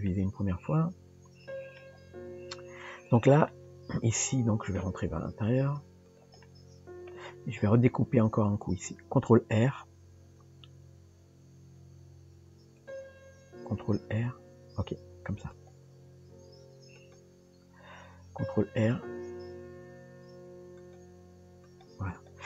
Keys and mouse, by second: 0.1-1.8 middle drag, 3.5-4.8 middle drag, 6.5 middle click, 22.1 click.